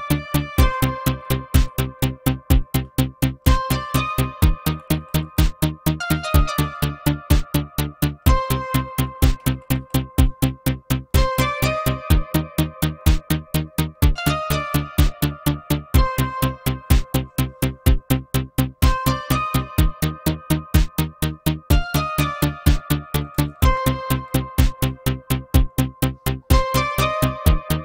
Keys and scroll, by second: 1.5 Down, 1.7 Up, 2.2 Up, 4.7 Insert, 4.8 Insert, 5.1 Insert, 9.4 Insert, 9.5 Insert, 9.8 Insert, 14.1 BackSpace, 23.2 BackSpace, 23.4 BackSpace, 23.6 BackSpace.